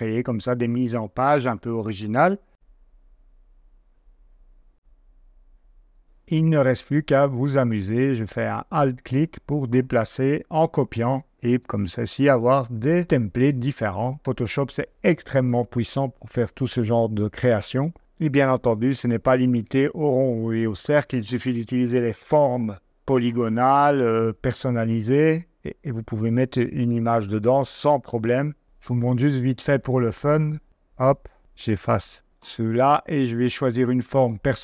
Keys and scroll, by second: 2.5 v, 4.2 super+;, 4.7 super+z, 11.2 0, 11.6 -, 32.3 BackSpace.